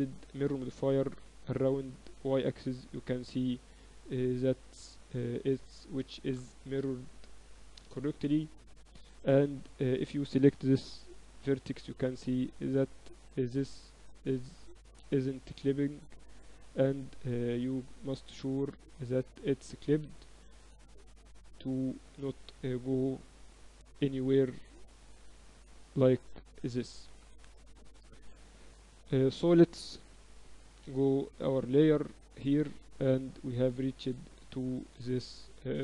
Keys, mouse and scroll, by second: 1.7-4.1 drag, 3.4 Tab, 3.8 Tab, 4.3 Tab, 4.5-9.5 right drag, 6.0 a, 8.3-10.2 drag, 9.4 ctrl+z, 10.0-12.3 right drag, 11.3 g, 16.2-18.2 right drag, 16.4 g, 18.2-24.0 drag, 21.2-23.0 right drag, 23.4-25.2 right drag, 24.0 g, 28.2 Tab, 28.8 Tab, 29.2 Tab, 29.6 Tab, 30.4 x, 31.6-33.4 drag, 32.7 Tab, 33.8 Tab, 33.8 click, 34.2 right click.